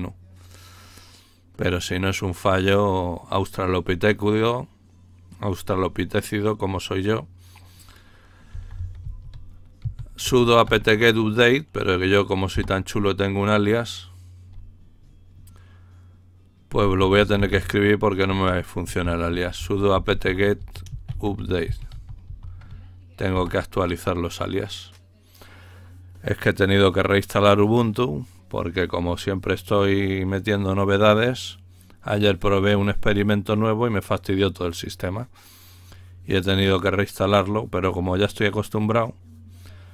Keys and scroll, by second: 8.5-11.1 typing, 12.5 Return, 14.2 typing, 16.9-23.3 typing, 24.5 typing.